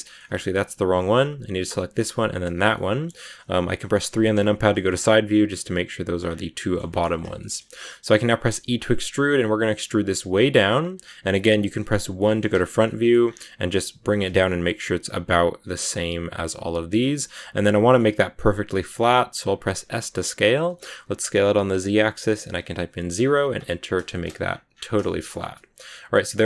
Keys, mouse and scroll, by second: 1.5 right click, 2.2 shift+right click, 2.4 scroll down 2, 2.6-4.0 middle drag, 4.0 KP_3, 4.6 shift+middle click, 4.8 shift+scroll up 1, 6.1 scroll down 7, 6.5 middle click, 6.9 shift+scroll up 1, 7.1 scroll down 1, 7.3-8.4 shift+middle drag, 8.4 e, 12.1 KP_1, 12.7 shift+middle click, 13.1 scroll up 2, 13.9 g, 17.2 scroll up 2, 17.5-19.7 middle drag, 19.7 s, 24.3 scroll up 1, 24.3-24.7 scroll down 10, 24.9 shift+middle click, 25.3 Tab, 25.4-26.4 middle drag.